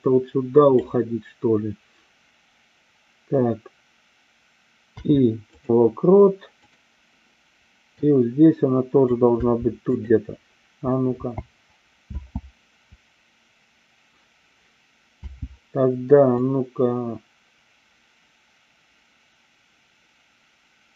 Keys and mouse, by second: 6.7 click, 8.1 click, 11.2 n, 12.1 space, 15.3 space, 16.4-20.9 drag.